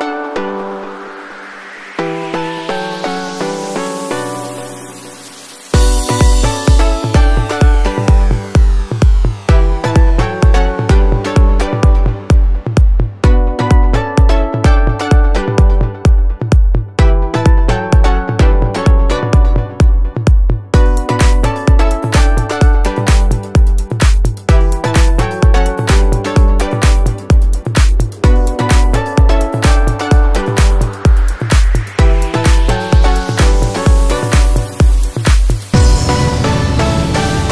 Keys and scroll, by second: 6.0 ctrl+z, 13.5 alt+BackSpace, 14.2 ctrl+d, 16.7 ctrl+h, 20.5 ctrl+t.